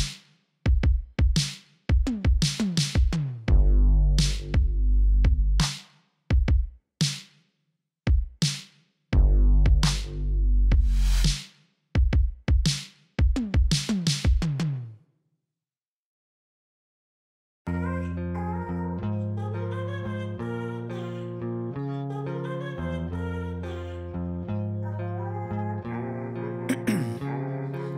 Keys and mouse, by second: 8.4-9.6 drag, 9.9-10.9 drag, 11.8-13.7 drag, 13.9-15.4 drag, 15.2 e, 16.8 click, 17.0 middle click, 17.5 click, 18.0 click, 18.7 click, 19.2 middle click, 19.5 click, 20.0-21.4 drag, 21.8 click, 22.8 middle click, 23.0 click, 23.5 click, 24.3 click, 25.3 middle click, 25.6 click, 26.0 click, 26.7 click, 27.0 ctrl+z, 27.0-27.9 typing.